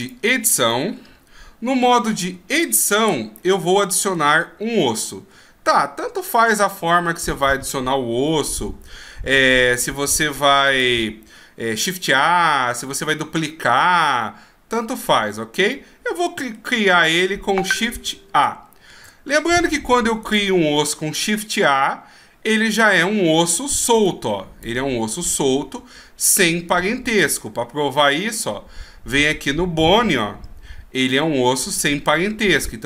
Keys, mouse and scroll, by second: 0.1 click, 0.7 middle click, 2.5 shift+scroll down 1, 3.4 middle click, 5.0-6.1 shift+scroll up 1, 8.5 shift+s, 15.7 middle click, 18.9 shift+a, 20.2 right click, 24.0 click, 28.3 click.